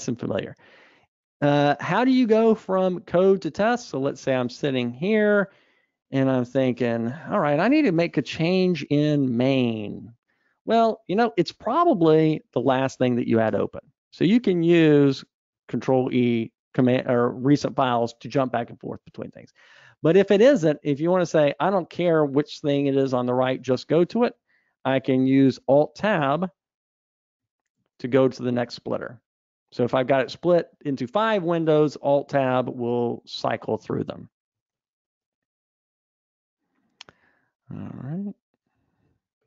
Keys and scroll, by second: 13.1 super+e, 35.8 super+Up.